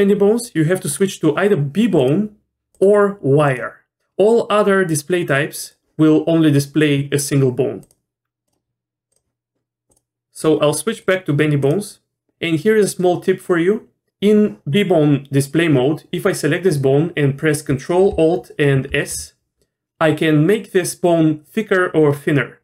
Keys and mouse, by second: 1.0-2.1 drag, 2.7-3.6 drag, 4.9-5.7 drag, 7.2-7.9 drag, 8.5-9.1 drag, 9.9-10.2 drag, 11.0 click, 18.9 ctrl+alt+s.